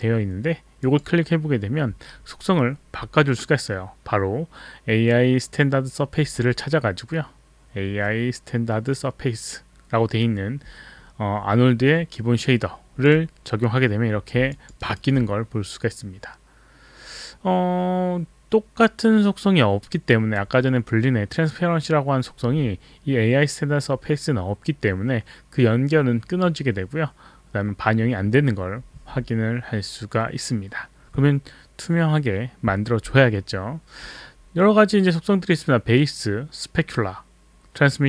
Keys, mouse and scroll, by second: 0.9 click, 13.0 click, 14.6 alt+click, 14.8 alt+right click.